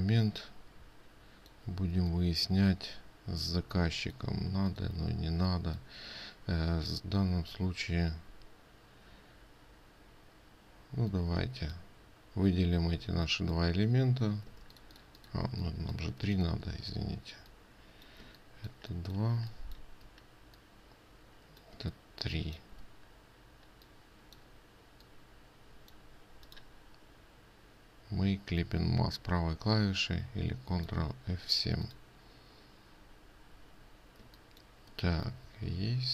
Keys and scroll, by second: 13.5 ctrl+space, 15.0 ctrl+space.